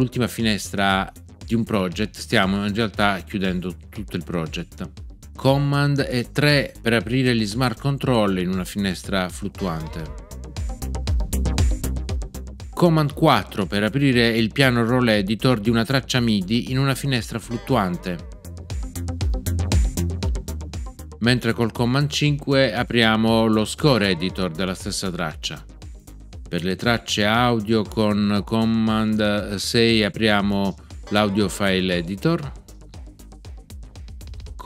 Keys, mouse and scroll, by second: 9.5 super+3, 17.4 super+4, 23.8 super+5, 31.0 super+6.